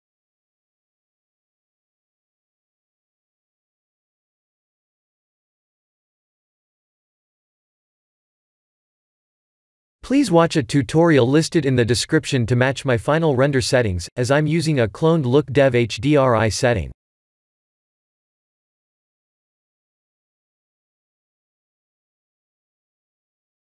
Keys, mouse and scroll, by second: 1.4 click, 2.7 click, 4.0 click, 4.8-5.8 scroll down 4, 5.8 scroll down 4, 6.0 shift+middle click, 6.4-8.3 shift+middle click, 6.8 middle click, 7.0 middle click, 7.2 middle click, 7.4 middle click, 7.8 middle click, 8.1 middle click, 9.2 click, 9.5 b, 18.1 click, 20.0 click, 21.0 click, 21.8 click, 22.8 click.